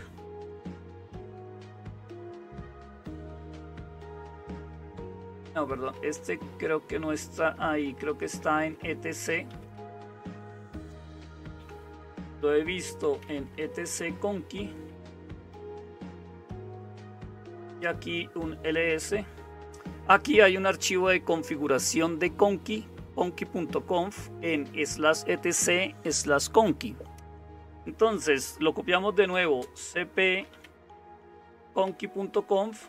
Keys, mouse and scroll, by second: 0.0-32.8 typing, 15.5 Tab, 16.7 Return.